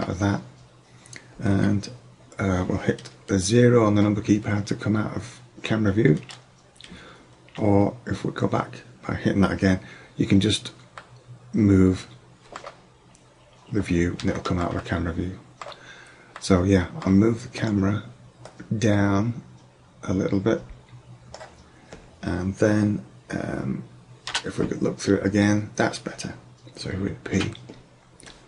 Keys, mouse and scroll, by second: 6.3 KP_0, 7.5 KP_0, 12.9 middle click, 13.5 middle click, 18.5-20.1 drag, 24.4 KP_0, 27.5 p.